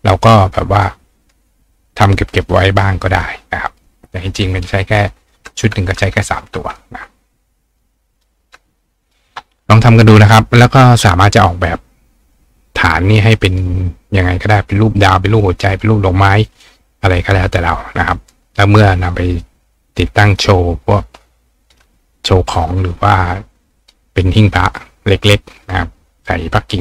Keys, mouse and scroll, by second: 0.8-1.9 drag, 3.8-5.6 drag, 5.6 click, 6.2 click, 6.8 click, 7.8 click, 9.0 click.